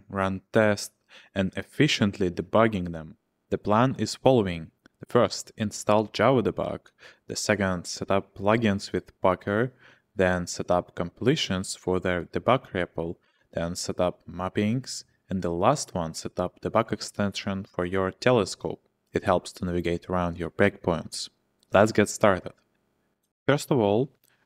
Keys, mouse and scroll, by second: 0.0-1.1 typing, 2.8 ctrl+h.